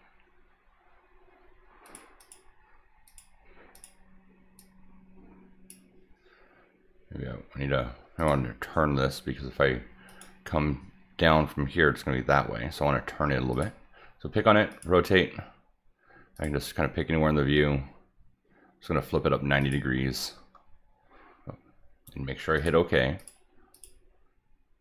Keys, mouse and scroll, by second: 1.9 click, 2.2 click, 3.1 click, 3.7 click, 4.6-5.7 drag, 8.2 click, 10.1 click, 13.1 Escape, 13.5 click, 14.7 click, 16.4 click, 19.6 click, 20.4 Escape, 22.6 click, 23.2 click, 23.7 click.